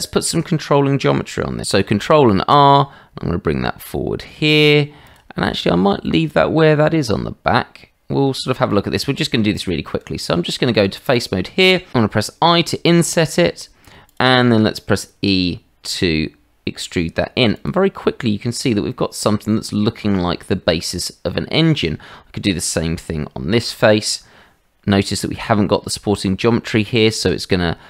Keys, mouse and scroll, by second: 1.6 ctrl+q, 1.8 ctrl+r, 5.6 shift+middle click, 6.0-8.1 middle drag, 8.4 shift+middle click, 9.1 middle click, 9.6 shift+middle click, 10.1 Tab, 12.0 i, 14.8 e, 18.0 middle click, 18.9 shift+middle click, 19.5 middle click, 20.4 shift+middle click, 21.3 middle click, 21.9 shift+middle click, 26.8 i.